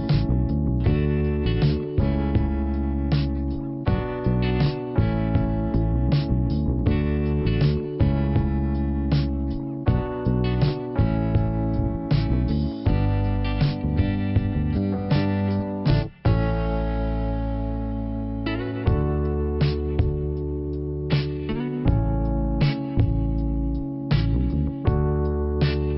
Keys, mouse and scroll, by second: 0.0 click, 0.5 click, 2.3 click, 5.5 click, 6.8 click, 8.9 click, 9.3 click, 13.0 click, 14.7 click, 14.9 right click, 15.1 double right click, 15.7 click, 16.0 click, 16.7 right click, 17.5 click, 19.0 click, 19.9 click, 20.1 click, 20.3 right click, 20.4 double right click, 21.0 click, 22.7 click, 23.0 right click, 23.7 right click.